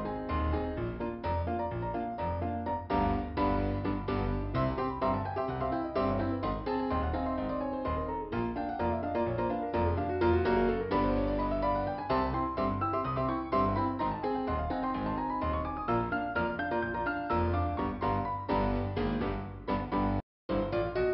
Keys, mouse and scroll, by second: 2.2 click, 2.6 click, 8.1 scroll down 2, 12.1-12.7 scroll down 1, 13.5 click, 19.1 click.